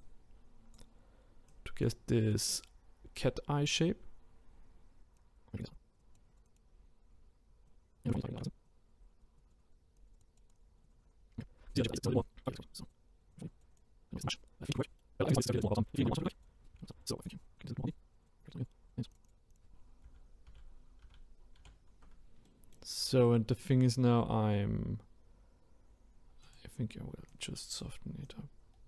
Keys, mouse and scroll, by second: 3.0-4.0 scroll down 4, 4.0-5.1 scroll up 1, 5.1-6.8 drag, 6.8 scroll down 7, 7.1-7.6 scroll up 4, 7.7-8.5 drag, 8.6-11.4 drag, 11.4-11.8 scroll down 3, 12.2 middle click, 12.8-13.9 drag, 13.9 scroll down 2, 14.0 middle click, 14.2-14.7 scroll up 2, 14.3 middle drag, 14.7 scroll down 2, 15.0 scroll up 1, 15.1-15.8 scroll down 3, 15.2 middle drag, 15.5 middle click, 15.8 middle drag, 16.0 scroll up 1, 16.1-16.5 drag, 16.5 scroll down 2, 16.7 ctrl+z, 16.8 middle click, 17.2-17.9 drag, 18.1-18.7 drag, 18.7 middle drag, 19.0-20.0 drag, 20.0 ctrl+z, 20.5 ctrl+z, 21.6 ctrl+z, 22.5-23.1 middle drag, 23.1-23.5 scroll up 1, 23.5-26.4 middle drag, 26.4-28.8 drag.